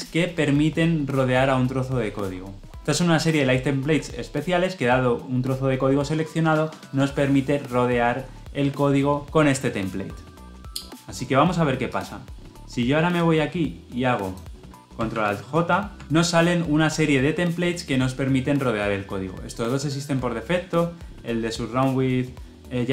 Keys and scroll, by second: 15.0 ctrl+alt+j.